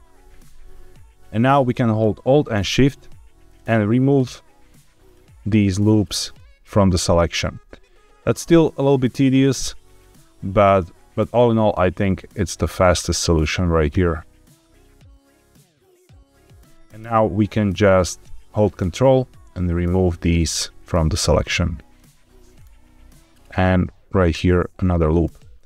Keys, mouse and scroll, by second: 0.0 ctrl+KP_Add, 0.8 scroll up 1, 3.4 alt+shift+click, 4.9 alt+shift+click, 6.2 alt+shift+click, 7.2 alt+shift+click, 8.1 alt+shift+click, 9.0 alt+shift+click, 9.8 alt+shift+click, 10.6 alt+shift+click, 11.1 ctrl+alt+shift+z, 11.1 alt+shift+click, 11.9 alt+shift+click, 12.8 alt+shift+click, 13.7 alt+shift+click, 14.7-16.0 alt+shift+drag, 19.0 ctrl+click, 20.7 ctrl+click, 21.7 ctrl+click, 24.1 alt+shift+click.